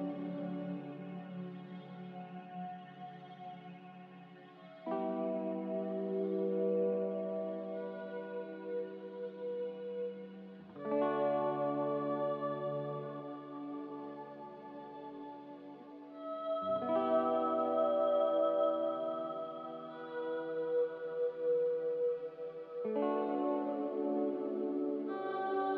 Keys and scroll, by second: 3.5 Delete, 5.9-6.8 typing, 9.3-10.1 typing, 16.1 a, 19.4 ctrl+z.